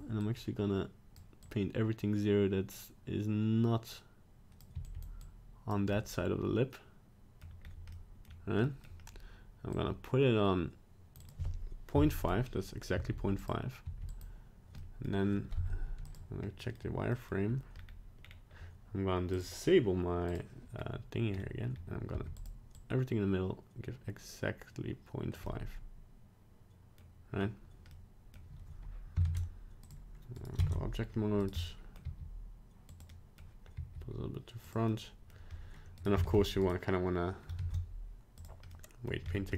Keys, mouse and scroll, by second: 0.4 click, 1.7 click, 4.9 f, 5.4 click, 5.9 middle click, 7.6 scroll up 1, 7.9 middle click, 8.3 scroll down 1, 8.6 middle click, 9.7 click, 11.2 click, 12.9 f, 13.8 f, 14.8 middle click, 15.5 z, 16.6 middle click, 17.1 middle click, 17.7 scroll up 2, 18.2 scroll down 2, 19.3 click, 20.3 click, 20.7 scroll up 1, 21.3 scroll down 2, 21.7 scroll up 1, 22.1 f, 22.8 click, 25.4 middle click, 27.3 scroll down 1, 27.9 middle click, 29.2 ctrl+Tab, 30.3 right click, 30.7 ctrl+Tab, 31.4 right click, 31.6 middle click, 32.1 g, 33.1 middle click, 33.7 g, 34.9 middle click, 36.0 right click, 36.2 ctrl+Tab, 36.6 right click, 37.5 ctrl+Tab, 38.7 middle click, 39.2 scroll up 2.